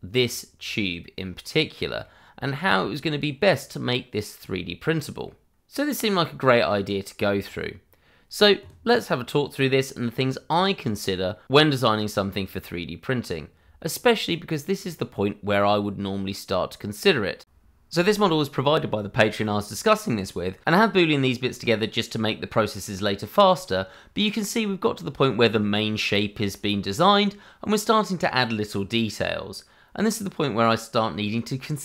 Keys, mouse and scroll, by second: 0.1 middle click, 2.3 scroll down 1, 2.8 shift+middle click, 3.2 scroll up 1, 4.5 middle click, 5.7 middle click, 8.4 middle click, 9.9 scroll down 1, 10.2 shift+middle click, 13.7 shift+middle click, 14.7 click, 20.0 click, 23.4 click, 26.6 shift+middle click, 26.9-28.0 scroll up 1, 28.0 click, 28.5 middle click, 31.1 scroll down 1, 31.6 shift+middle click.